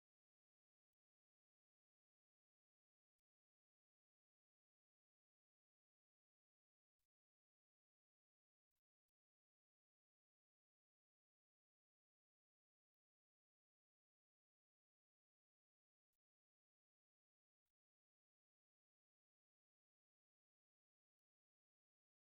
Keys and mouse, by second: 2.6 click, 6.7 click, 8.4 click, 11.8 click, 16.2 click, 17.3 middle click, 18.6 ctrl+middle click, 20.5 click.